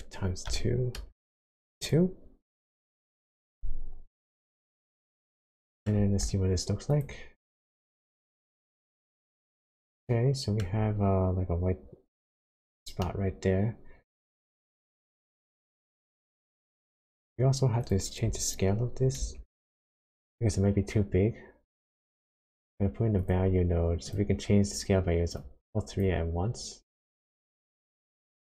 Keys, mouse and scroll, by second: 1.8 click, 4.0-4.8 scroll down 4, 5.1 scroll down 1, 5.5 shift+middle click, 6.0 scroll up 1, 7.0 ctrl+shift+click, 10.0 shift+middle click, 13.0 shift+middle click, 14.6-15.3 scroll up 4, 15.5 shift+middle click, 16.8-17.8 scroll down 1, 17.8 click, 19.2 shift+a, 25.3 click, 26.9 click.